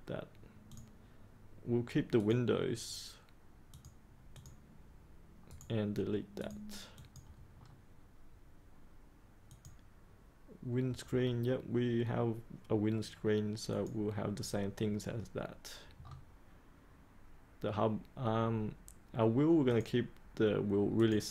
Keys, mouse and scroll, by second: 5.4 right click, 6.3 click, 7.5-8.7 scroll down 1, 9.4-10.6 drag, 11.1 scroll down 1, 13.7 click, 15.9-17.9 scroll up 1, 19.7 click.